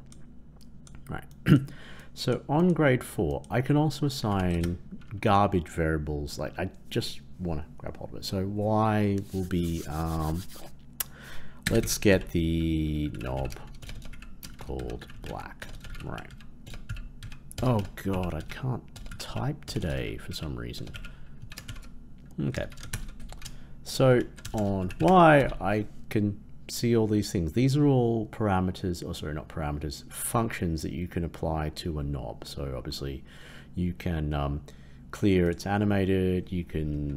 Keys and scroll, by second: 22.8 ctrl+Return.